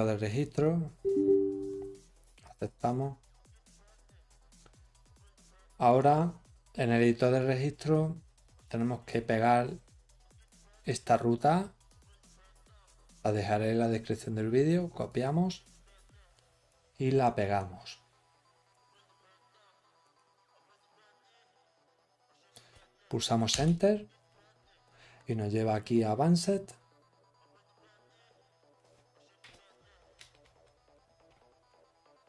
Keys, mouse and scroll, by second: 11.8 click, 13.1 right click, 15.0 click.